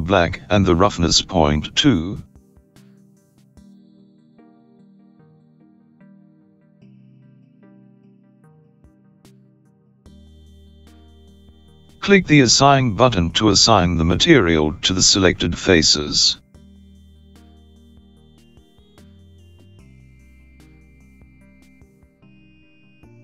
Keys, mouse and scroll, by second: 4.6-5.2 scroll down 1, 5.2-7.6 scroll down 3, 7.6-9.5 scroll down 2, 9.5 click, 15.1-16.2 scroll up 6, 17.8 click.